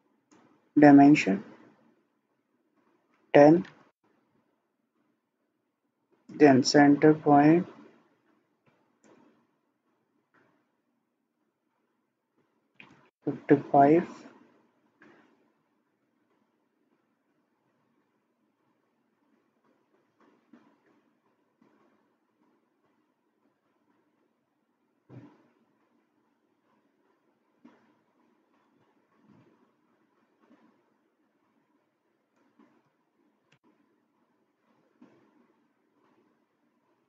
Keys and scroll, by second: 3.4-4.2 typing, 12.5-13.2 typing, 32.9 typing, 33.6 Return.